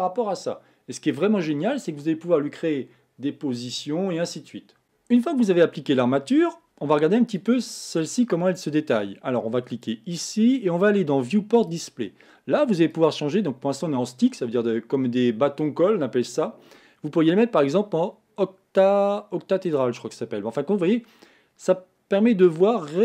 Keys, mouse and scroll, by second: 4.8 click, 5.6-7.4 middle drag, 7.4 click, 9.8 click, 11.6 click, 12.9-15.9 drag, 20.6-23.0 middle drag.